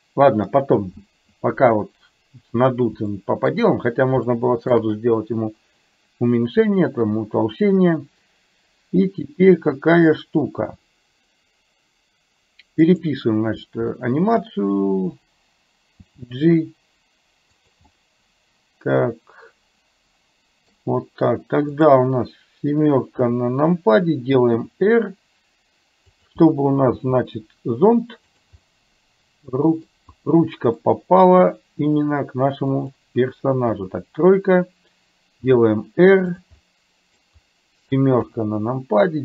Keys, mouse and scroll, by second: 3.2 shift+middle click, 4.4 shift+middle click, 13.1 click, 14.0 shift+middle click, 16.1 g, 18.0-20.7 middle drag, 20.7-21.7 scroll down 1, 21.7 click, 23.1 KP_7, 24.7 r, 27.0 g, 28.6-29.9 scroll up 1, 29.9 scroll down 1, 30.9 scroll up 1, 31.1 middle click, 33.7 KP_1, 35.5 r, 36.6 middle click, 38.4 KP_7.